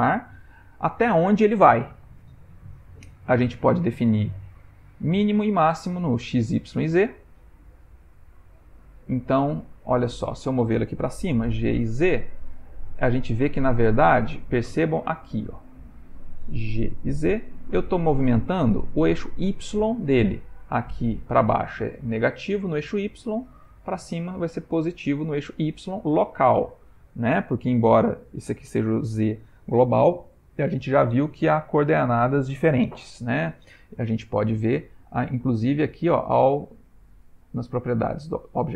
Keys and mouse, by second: 11.3 g, 16.9 g, 35.6 click.